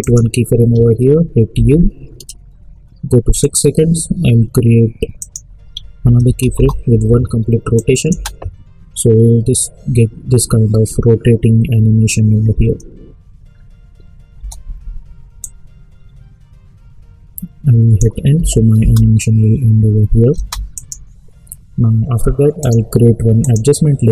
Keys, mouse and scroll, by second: 0.0 click, 1.5 u, 3.4 click, 6.5 Return, 7.7 click, 8.3 space, 14.3 space, 15.4-18.3 drag, 18.3 n, 18.7 space, 20.7 click, 22.6 right click, 23.4-24.1 drag.